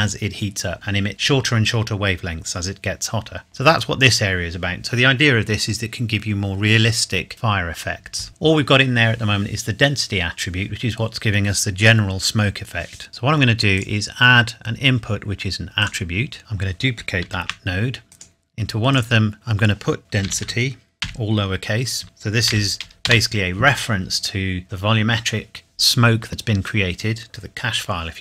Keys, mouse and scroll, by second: 3.5 middle click, 13.8 click, 16.4-17.0 scroll down 1, 17.3 shift+d, 18.1 click, 20.5-22.7 typing, 23.1 Return.